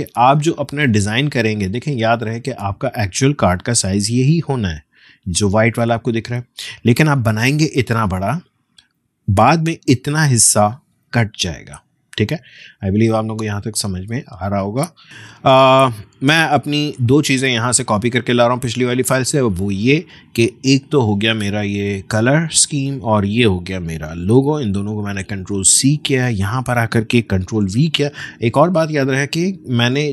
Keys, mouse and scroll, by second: 16.4 click, 16.5 click, 19.4-19.8 alt+scroll down 1, 20.5-24.1 drag, 24.1 ctrl+c, 25.5 click, 27.6 ctrl+v.